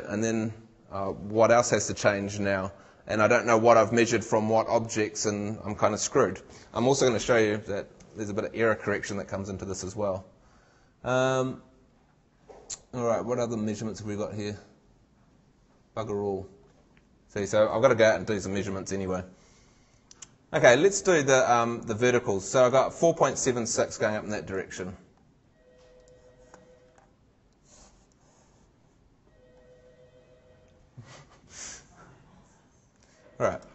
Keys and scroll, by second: 8.0 super+Tab, 23.5 super+Tab.